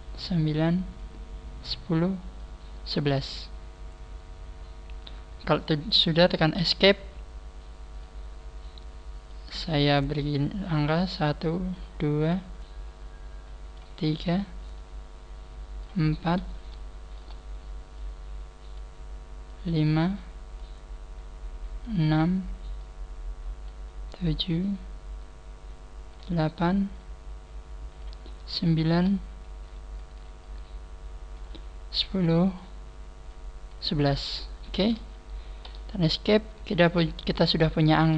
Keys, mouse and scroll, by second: 7.9 click, 8.5-9.3 scroll up 1, 9.7 scroll up 1, 14.1-14.7 scroll up 2, 15.8 scroll up 1, 16.7 shift+middle click, 28.5 shift+middle click, 29.9 shift+middle click, 34.1 scroll down 4, 35.7 scroll down 1, 37.5 shift+middle click.